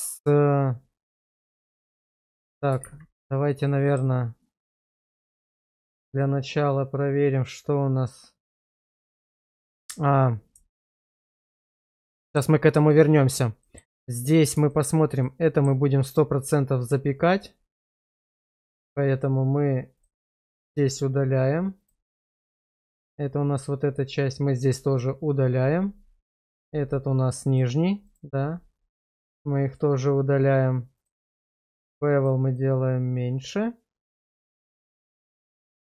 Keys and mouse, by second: 2.9 shift+z, 3.7-4.0 middle drag, 4.7 middle click, 5.5 shift+middle click, 7.6 click, 10.7 shift+middle drag, 11.3-12.0 middle drag, 12.2 shift+middle drag, 13.6 shift+middle click, 14.7 shift+middle drag, 18.2 click, 18.7 click, 19.9 click, 22.5 click, 24.9 click, 27.6 click, 28.2 click, 29.3 click, 32.2 click, 32.5 click, 34.9 click.